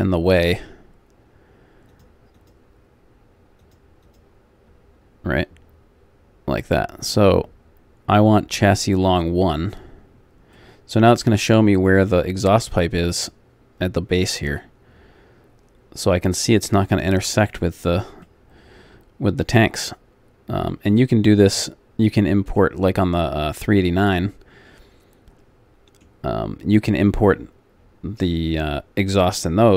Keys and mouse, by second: 9.1 middle click, 9.2-10.3 drag, 10.3 middle click, 17.0 middle click, 19.3 middle click, 22.7-23.8 middle drag, 23.8 middle click, 24.0 middle click.